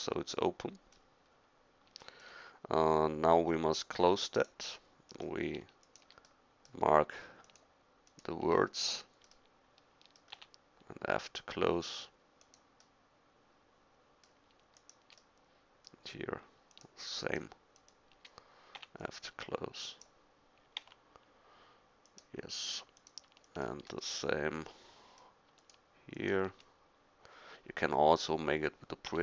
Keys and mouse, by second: 10.4 f, 18.8 f, 20.8 g, 29.1 f.